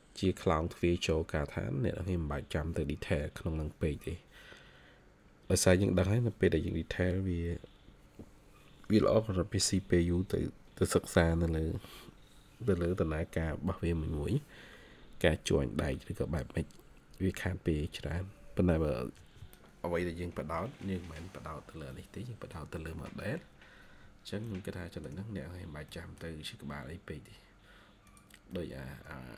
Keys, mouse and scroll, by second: 20.2 Escape, 21.0 scroll down 1, 21.8 middle click, 22.9-23.3 scroll up 1, 24.4 middle click, 25.3 scroll down 1, 25.8 middle click, 26.5 scroll up 1, 28.4 middle click.